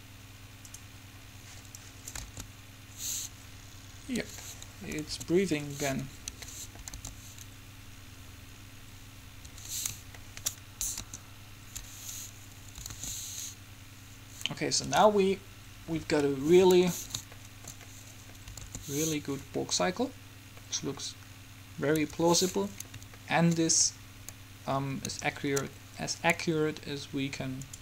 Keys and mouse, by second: 2.4 alt+a, 4.4 Escape, 5.2 alt+a, 6.6 Escape, 7.1 alt+a, 9.6 Escape, 11.1 KP_3, 13.0 alt+a, 15.0 Escape, 18.8 alt+a, 22.1 Escape.